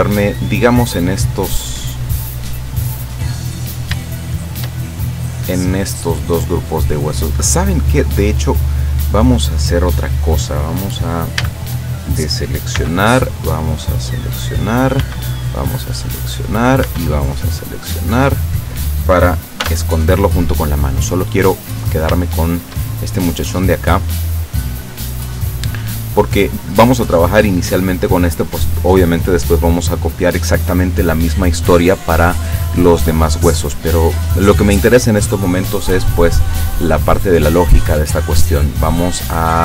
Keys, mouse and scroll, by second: 3.5 right click, 4.5 shift+right click, 4.8-6.7 shift+middle drag, 7.9 scroll down 1, 8.5 middle click, 11.4 a, 12.9 b, 13.3-14.1 drag, 15.1 b, 15.4-16.5 drag, 16.9 b, 17.1-18.4 drag, 19.7 h, 20.7-21.7 drag, 22.4 shift+middle click, 23.2-24.3 shift+middle drag, 24.4-26.5 middle drag, 36.9 right click.